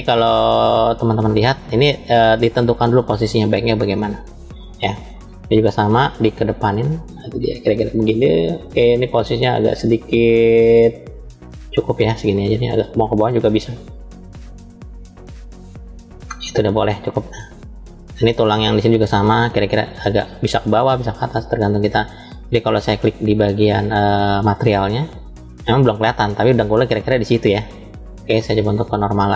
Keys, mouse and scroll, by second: 0.4 shift+middle click, 1.6-3.7 middle drag, 4.2 middle click, 5.4 click, 6.7-7.9 drag, 8.2-11.3 middle drag, 12.2 click, 13.5-14.8 drag, 15.8-17.2 middle drag, 17.5-18.9 middle drag, 19.3 click, 20.1 middle click, 20.9 click, 24.8 click, 27.8 click.